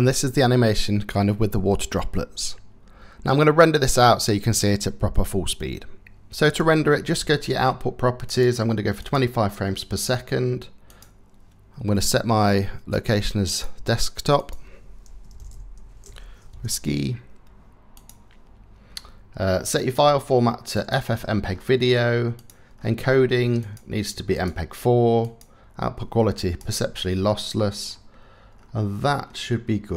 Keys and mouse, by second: 6.1 click, 8.0-8.8 drag, 10.6 click, 19.5-20.5 drag, 22.0 drag, 23.3-24.1 drag, 24.8-26.3 drag.